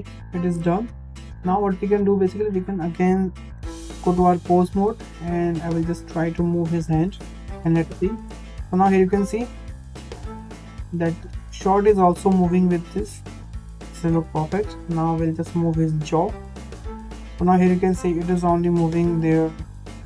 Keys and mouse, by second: 0.0 shift+middle click, 0.8 middle click, 3.9 ctrl+Tab, 4.5 middle drag, 5.6 shift+middle drag, 6.4 drag, 6.8-7.3 middle drag, 7.5 g, 12.0 g, 14.5 shift+middle click, 15.6 drag, 16.7 g.